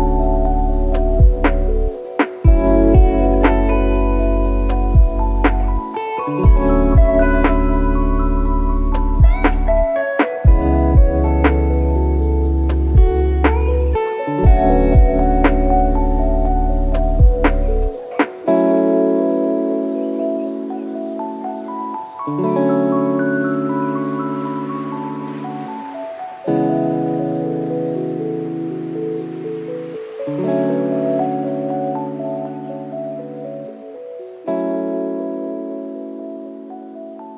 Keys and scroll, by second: 13.5 ctrl+d, 16.0 ctrl+KP_0, 29.0 KP_Subtract, 29.3 KP_1, 30.1 Return, 33.1 KP_Add, 33.5 KP_0, 37.3 KP_Subtract.